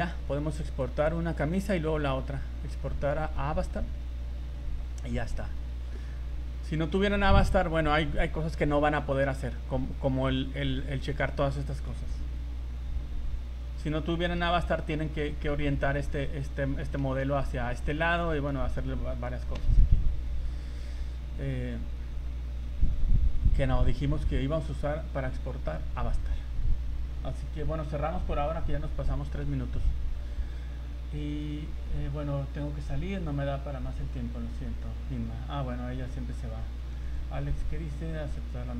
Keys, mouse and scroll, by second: 0.7 click, 6.9 Escape, 6.9 scroll down 3, 8.7 scroll up 3, 9.0 scroll down 2, 9.5-10.2 scroll up 9, 13.6-14.2 scroll down 2, 14.4 KP_7, 15.2 scroll down 1, 17.0 a, 17.9 Escape, 18.1 middle click, 21.3 scroll up 3, 21.7-22.0 scroll down 3.